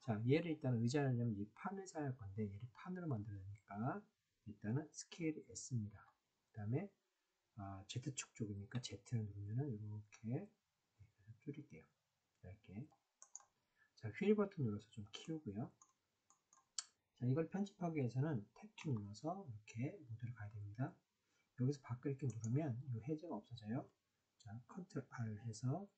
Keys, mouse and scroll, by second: 5.9 s, 8.6 z, 13.1 click, 15.2 middle click, 16.2 middle click, 18.7 Tab, 22.2 click, 25.0 ctrl+r.